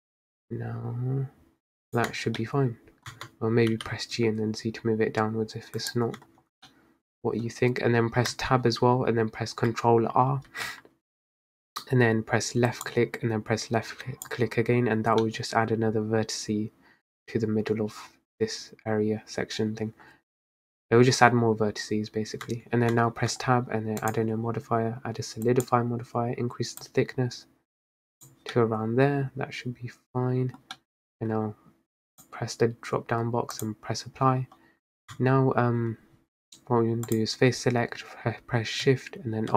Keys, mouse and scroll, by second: 2.2 Tab, 2.5-3.2 middle drag, 3.2 Tab, 3.8 g, 6.3 Tab, 6.8-7.7 middle drag, 7.7-8.4 scroll up 1, 8.4 Tab, 10.6 ctrl+r, 15.3 middle click, 15.5-17.0 scroll up 1, 17.0-18.5 scroll up 1, 22.6 Tab, 23.0 Tab, 23.4 Tab, 25.8-28.6 drag, 28.6-32.2 middle drag, 32.2-35.2 drag, 35.2 Tab, 37.2-39.5 drag.